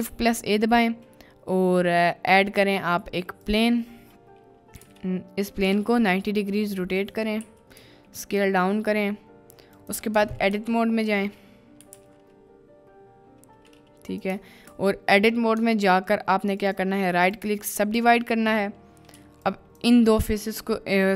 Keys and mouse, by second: 4.8 r, 4.9 x, 5.6 9, 5.8 0, 6.0 click, 7.1 drag, 7.4 s, 9.8 ctrl+click, 10.1 Tab, 10.5 KP_Decimal, 11.8 g, 11.9 x, 14.1 click, 14.6 ctrl+z, 15.5 Tab, 16.6-17.4 drag, 19.1 2, 19.4-19.9 middle drag.